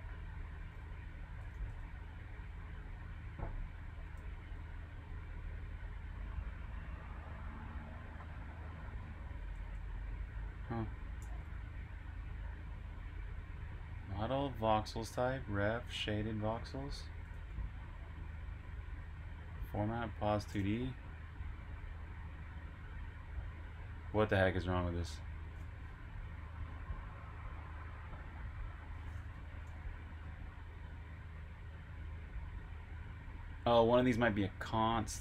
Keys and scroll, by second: 0.7-1.5 typing, 3.6-4.4 typing, 6.2-7.0 typing, 9.4 j, 10.9-11.8 typing, 16.9 Escape, 17.0 typing, 18.7-21.1 typing, 29.4 Escape, 31.8 typing, 33.4-35.2 typing.